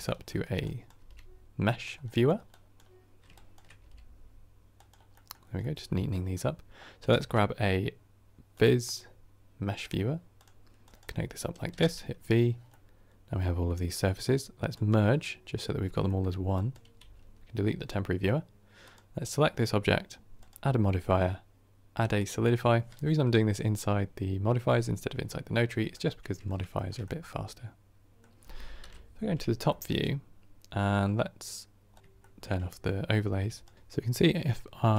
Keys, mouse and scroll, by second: 9.8 shift+a, 11.8 v, 12.6-14.6 middle drag, 14.6-16.9 drag, 16.9 x, 17.8-18.8 middle drag, 18.8 click, 22.2-25.6 drag, 25.8-28.7 middle drag, 28.7 KP_7, 29.6-31.8 shift+middle drag, 31.8 click, 32.0 scroll up 1, 32.2-33.7 shift+middle drag, 33.7-34.9 drag.